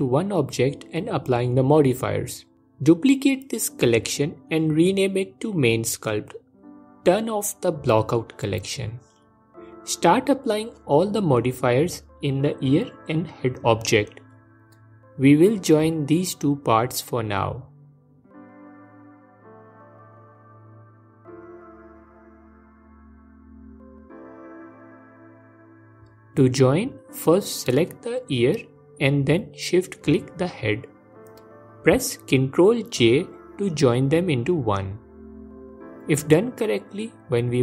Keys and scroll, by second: 22.7 F4, 25.9 F4, 30.7 ctrl+j.